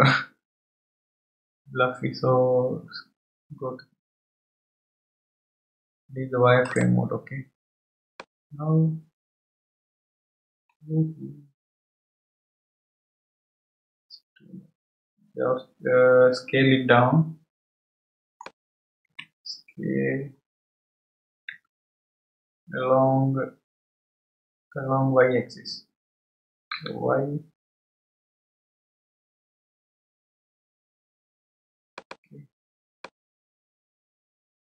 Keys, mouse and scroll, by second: 6.7 click, 8.2-11.2 middle drag, 19.1 KP_3, 20.4-21.5 scroll up 1, 21.5 s, 33.0-34.7 middle drag.